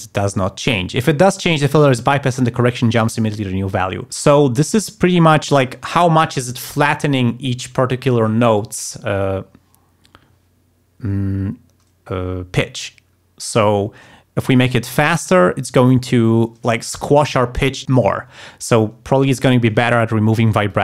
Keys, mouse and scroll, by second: 14.9-16.2 drag, 20.7-20.8 drag.